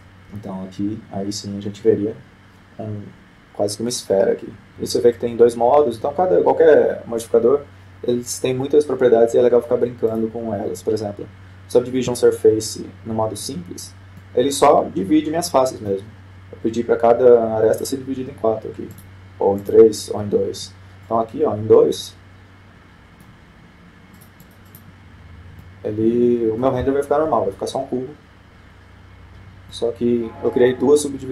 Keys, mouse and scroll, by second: 0.0 click, 0.8 F12, 11.5-12.9 drag, 15.6-17.1 middle drag, 17.4-18.2 scroll up 1, 18.2-18.6 scroll up 1, 20.3-22.3 drag, 22.5-23.9 middle drag, 25.6-27.6 drag, 27.0-28.4 middle drag, 28.7 F12, 31.2-31.3 middle drag.